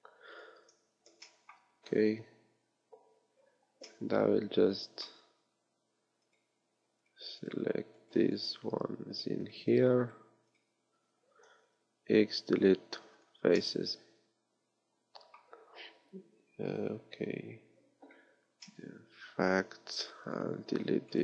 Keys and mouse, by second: 0.5-3.9 middle drag, 11.7 x.